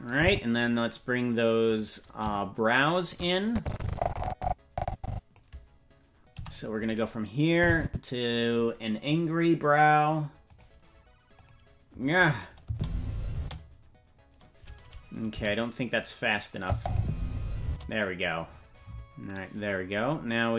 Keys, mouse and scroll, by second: 0.1 click, 1.9 right click, 3.0 shift+right click, 3.4-5.4 drag, 6.3 i, 7.5 click, 10.5 click, 11.4 click, 12.6 space, 13.4 space, 14.7 right click, 15.3 g, 16.6 click, 16.7 space, 17.6 space, 19.5 click.